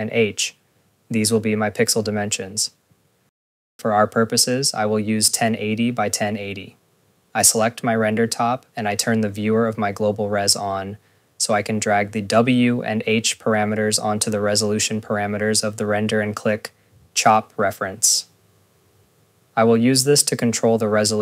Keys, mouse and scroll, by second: 6.7 scroll, 7.5 click, 12.1 click, 14.8 click, 15.3 scroll, 15.6 click, 16.5 ctrl+s, 17.0 click, 19.3 click, 20.8 click.